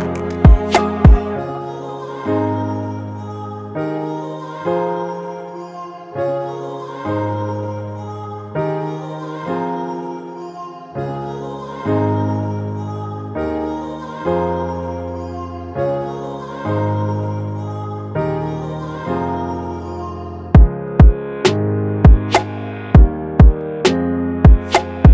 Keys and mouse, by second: 8.1 F12.